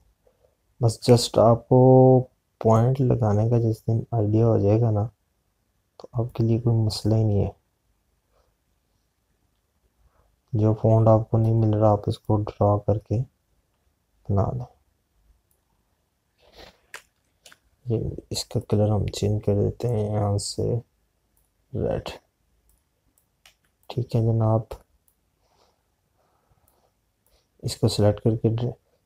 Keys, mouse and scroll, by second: 1.6 click, 2.0 ctrl+z, 4.7 click, 16.3 click, 19.6 click, 24.5 z, 24.7 click.